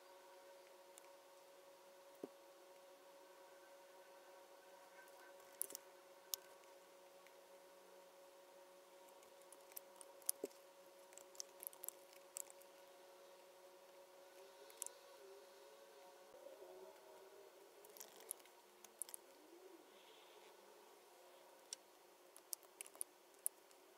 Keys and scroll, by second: 10.2 super+F9, 10.2 shift+super+9, 23.3 super+9, 23.4 super+F9.